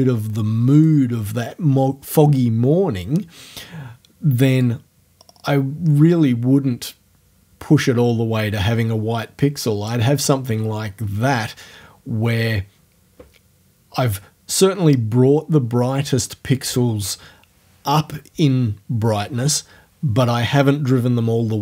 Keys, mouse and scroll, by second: 4.7-10.1 drag, 10.1-14.4 scroll up 1.